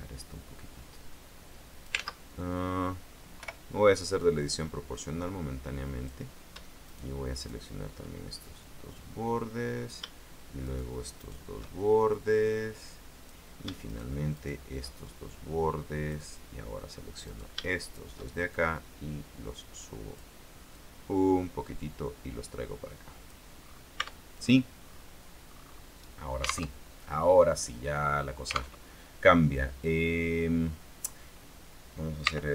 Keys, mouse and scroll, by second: 0.8-1.2 scroll up 2, 3.5 o, 4.3-6.4 drag, 7.0 shift+right click, 7.5 shift+right click, 8.6-10.2 shift+drag, 10.8 shift+right click, 11.3 shift+right click, 12.3-13.6 drag, 14.0 shift+right click, 14.5 shift+right click, 15.4-16.5 shift+drag, 17.4 right click, 17.9 shift+right click, 18.7-20.5 shift+drag, 20.9-23.7 drag, 23.7-25.3 scroll down 2, 24.1 Tab, 25.6-26.1 scroll up 2, 26.9 alt+Tab, 28.9 alt+Tab, 29.9 scroll down 2, 32.4 r.